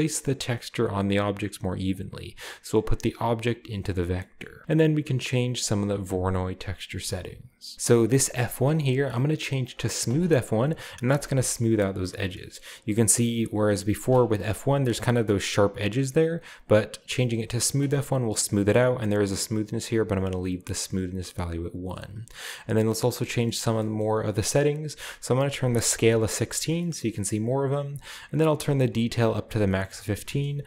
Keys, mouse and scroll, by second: 1.9-3.2 drag, 3.5 click, 4.0-4.6 drag, 5.8-6.9 drag, 6.9 Tab, 7.6 scroll up 1, 8.5 click, 10.1 click, 11.3-12.1 shift+middle drag, 12.1-13.2 shift+scroll up 1, 13.2-14.3 drag, 14.3 middle drag, 14.5-15.3 scroll up 1, 16.6 click, 17.6 click, 18.8-20.1 drag, 21.7 click, 22.5 click, 23.3 middle click, 24.0 middle drag, 25.0 click, 25.5-25.9 typing, 26.1-26.8 drag, 26.6-28.2 scroll down 1, 26.8-27.3 middle drag, 28.7 click, 29.6-30.2 middle drag, 29.7-30.5 scroll up 1, 30.3 KP_0.